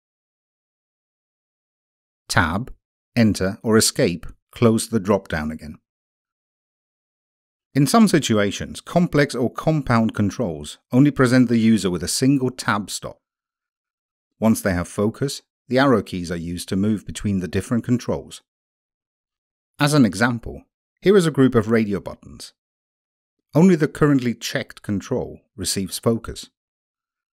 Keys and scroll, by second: 3.0 Return.